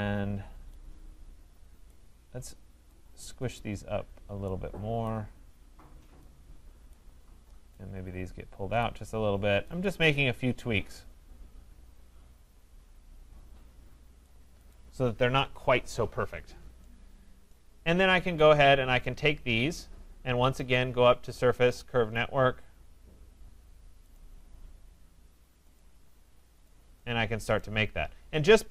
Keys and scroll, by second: 15.2 Escape.